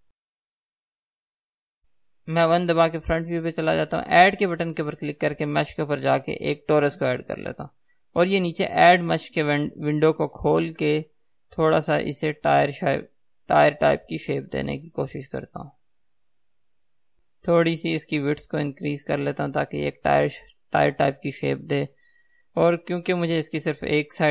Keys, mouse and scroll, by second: 0.7 KP_1, 1.9 x, 7.0-10.9 drag, 10.9-13.5 middle drag, 13.5-23.5 drag, 23.5 KP_1.